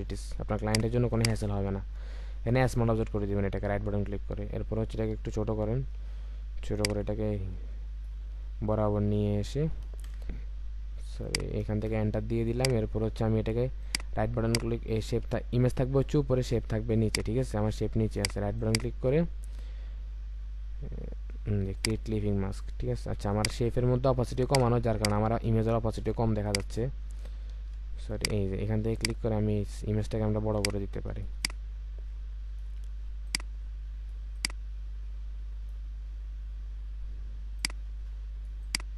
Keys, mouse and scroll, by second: 1.1 double click, 1.9-2.4 alt+scroll down 1, 5.0-5.7 alt+scroll down 1, 5.8-6.7 alt+scroll up 1, 8.3-8.8 alt+scroll up 1, 10.1 Return, 11.7 Return, 13.8 right click, 18.6 right click, 24.9 double click, 27.5 ctrl+z, 31.4 alt+click.